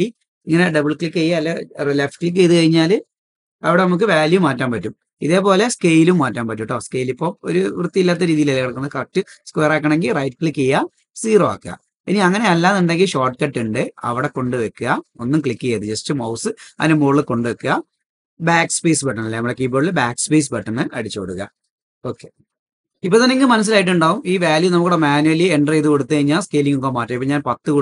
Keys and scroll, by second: 9.9 BackSpace, 25.7-26.2 typing.